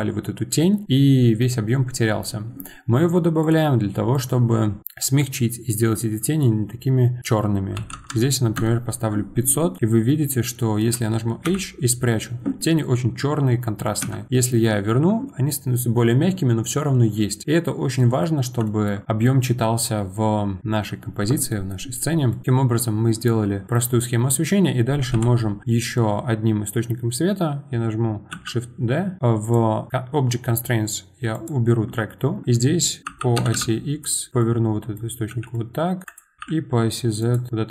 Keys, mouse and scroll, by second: 1.1-3.4 middle drag, 3.4 click, 4.1-8.5 drag, 8.5 KP_0, 11.4 h, 14.0 ctrl+z, 18.0-19.0 middle drag, 19.0-19.6 scroll down 3, 19.6-20.3 scroll down 5, 20.3-21.4 scroll up 2, 21.4-22.3 scroll up 1, 21.5 middle click, 22.3-25.1 shift+middle drag, 25.1 KP_7, 25.2 KP_7, 28.3 shift+d, 29.4 click, 31.3-32.4 drag, 32.4 middle click, 33.0 r, 34.4 middle click, 35.3 g, 36.4 r, 37.5 middle click.